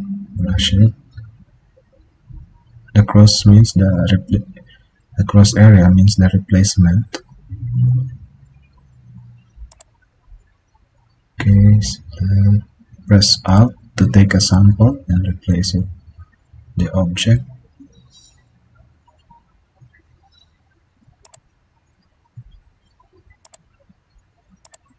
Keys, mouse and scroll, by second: 13.1 alt+click.